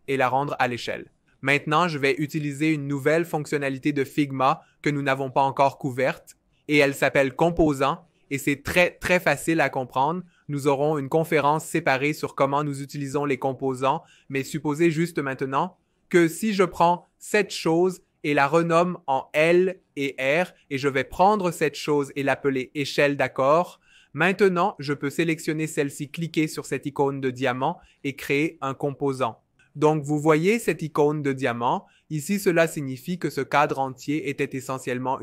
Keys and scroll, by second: 15.5 super+r, 17.3-18.6 typing, 19.9 super+r, 21.4-22.7 typing, 23.3 Return.